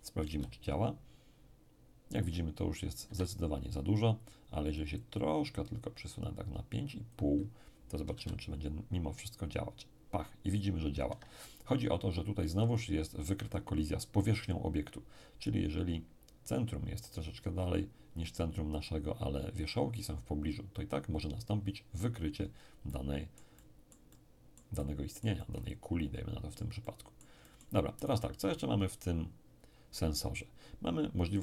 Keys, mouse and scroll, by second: 0.2 p, 3.0 Escape, 5.0-8.1 drag, 8.2 p, 11.0 Escape, 22.8-28.0 middle drag.